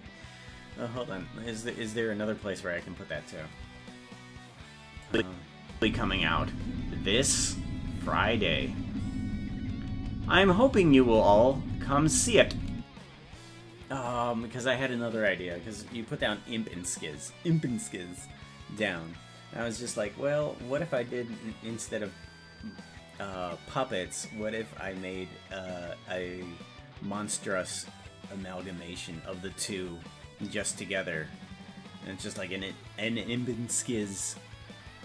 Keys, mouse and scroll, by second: 5.1 click, 5.8 space, 12.8 space.